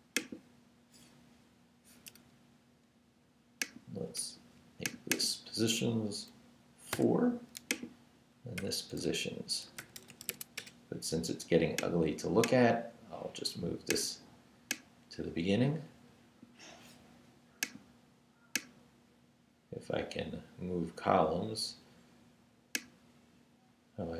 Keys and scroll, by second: 6.9 4, 8.6-10.8 typing.